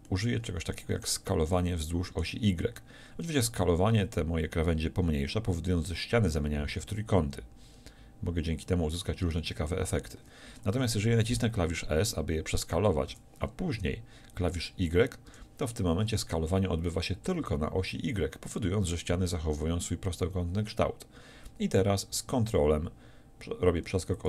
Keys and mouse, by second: 3.5 s, 13.2 s.